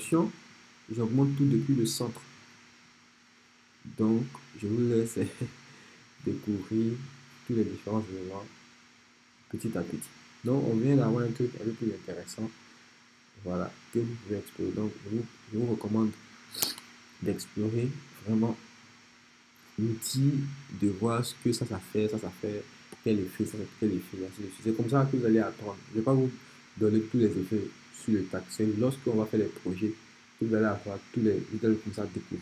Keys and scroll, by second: 16.6 BackSpace.